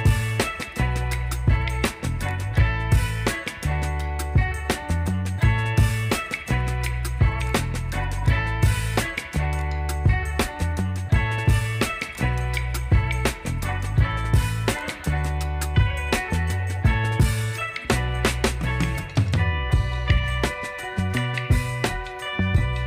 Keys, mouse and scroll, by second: 5.6 right click, 7.3 click, 8.8 click, 11.9 click, 17.7-22.3 shift+drag.